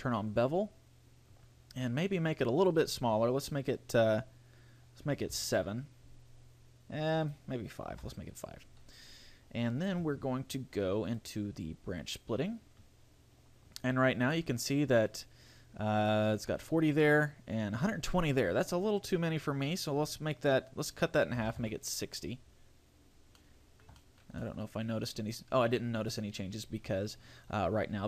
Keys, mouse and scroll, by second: 0.7 click, 2.7 click, 7.4 click, 11.3 click, 14.1-15.9 scroll up 5, 19.7 click, 23.5 middle click, 24.1 shift+middle click, 24.6 middle click.